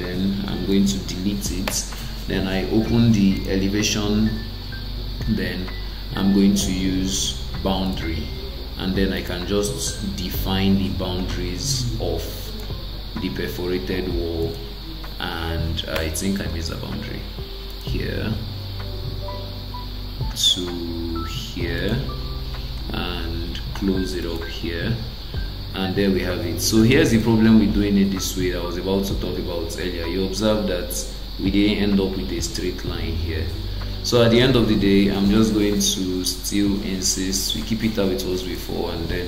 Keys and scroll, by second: 1.7 BackSpace, 16.0 BackSpace, 35.1 ctrl+z.